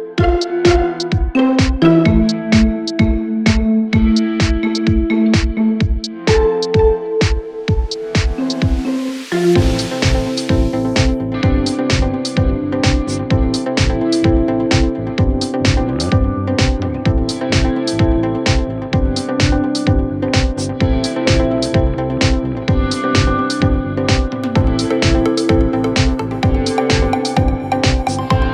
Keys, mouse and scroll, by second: 0.7 ctrl+click, 1.8 ctrl+click, 2.8 ctrl+t, 3.9-6.7 drag, 7.2 alt+scroll up 1, 8.0 click, 9.8 ctrl+t, 10.7 click, 13.0 ctrl+t, 13.9-15.6 drag, 17.9 click, 26.8 alt+scroll up 1, 27.3-28.5 drag.